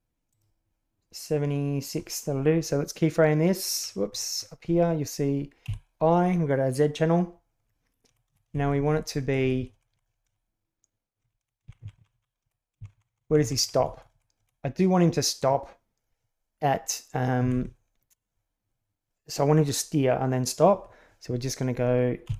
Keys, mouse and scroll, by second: 0.2 right click, 5.6 i, 8.0 Right, 8.2 Right, 8.4 Right, 8.6 Right, 8.8 Right, 8.9 Right, 9.1 Right, 9.2 Right, 9.4 Right, 9.5 Right, 9.7 Right, 9.9 Right, 10.1 Right, 10.2 Right, 11.2 Right, 11.4 Right, 11.6 Left, 11.8 Left, 11.9 Left, 12.1 Left, 12.4 Right, 12.7 Left, 12.9 Left, 13.1 Left, 13.2 Left, 13.4 Left, 13.5 Right, 13.8 Right, 13.9 Right, 14.1 Right, 14.4 Right, 17.4 Left, 17.6 Right, 22.2 i.